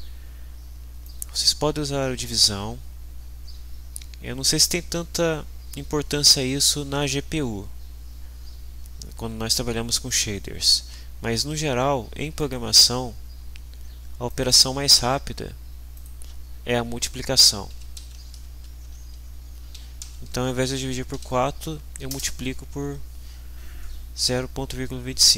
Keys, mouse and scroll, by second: 1.0-2.5 drag, 12.3 click, 14.3 click, 15.9 click, 17.5-21.1 typing, 22.1 Return.